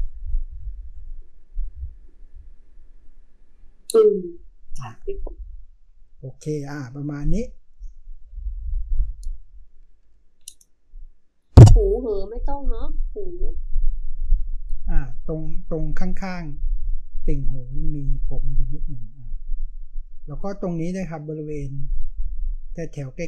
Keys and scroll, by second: 9.9-10.3 typing.